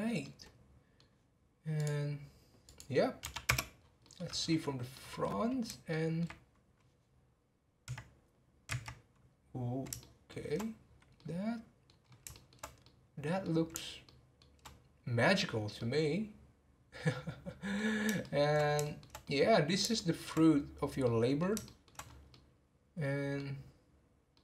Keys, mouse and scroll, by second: 0.2-1.8 middle drag, 1.8-3.8 drag, 3.8 scroll down 2, 4.0 middle click, 4.4 scroll up 3, 4.9 middle click, 5.9 middle click, 10.0 shift+middle click, 10.8 scroll down 1, 11.2 middle click, 12.0 scroll up 3, 12.3-17.9 shift+middle drag, 17.9 scroll down 2, 18.2-20.4 shift+middle drag, 20.4 scroll up 1, 21.0-22.0 middle drag, 22.0 scroll up 2, 22.3-23.5 middle drag, 23.5 scroll down 1, 24.3-24.4 middle drag.